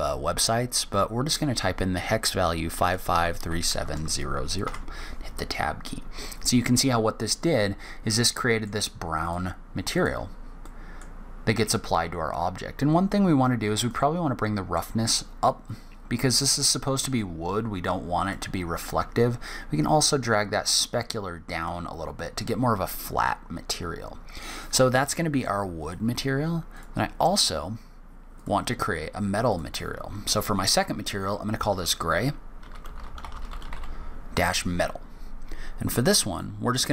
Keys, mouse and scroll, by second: 2.7 KP_5, 3.7 KP_0, 10.4 middle click, 10.9-11.4 scroll up 2, 11.7-12.1 scroll down 1, 12.1-13.5 scroll up 1, 13.7 click, 19.2 click, 26.5 click, 28.1 click, 29.3 click.